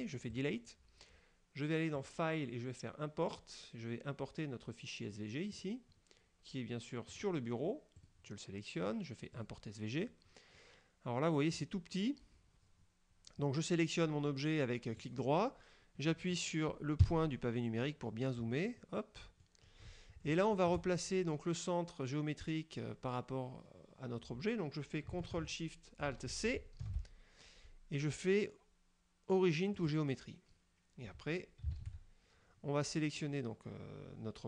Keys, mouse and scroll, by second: 0.5 click, 2.1 click, 5.6 click, 7.2 click, 8.1 click, 9.5 click, 10.2-10.5 scroll up 2, 11.7 right click, 15.1 right click, 17.1 KP_Decimal, 18.2-18.8 scroll down 4, 18.9 click, 20.3 shift+click, 26.6 ctrl+alt+shift+c, 29.8 click, 31.9 shift+s.